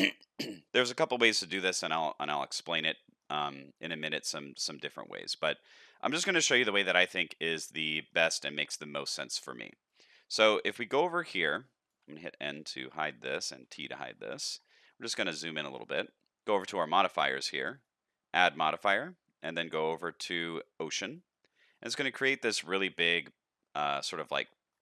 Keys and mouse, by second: 2.7-3.2 middle drag, 3.9-5.0 middle drag, 5.4 shift+middle drag, 5.9 middle drag, 6.4 shift+middle click, 7.3-8.0 middle drag, 10.0 click, 11.2 click, 12.5 n, 13.6 t, 14.8 middle click, 15.4 shift+middle drag, 16.5 click, 17.7-21.1 drag, 22.7-24.4 middle drag.